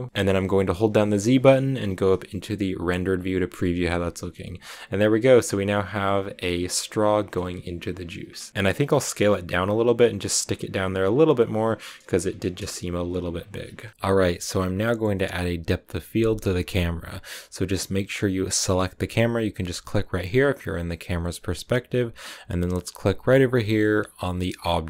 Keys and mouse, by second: 1.8 z, 5.0 click, 8.5 s, 8.9 click, 9.0 g, 10.1 click, 10.5 r, 10.9 click, 11.1 g, 11.4 shift+click, 12.0 s, 12.3 click, 12.4 g, 13.2 shift+click, 13.8 a, 18.4 click, 24.7 click.